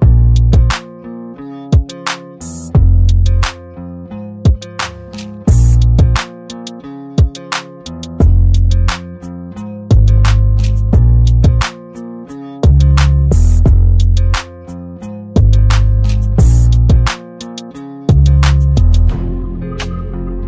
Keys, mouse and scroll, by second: 1.4 ctrl+d, 3.0-5.0 drag, 5.9 ctrl+g, 6.5 click.